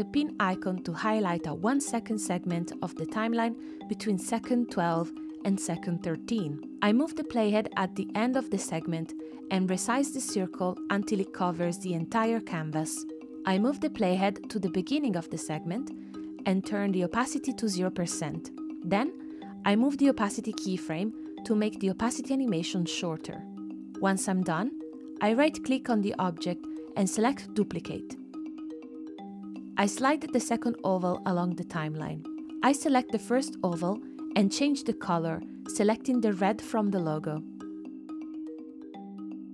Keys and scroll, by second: 17.3 space, 32.4 space, 39.1 space.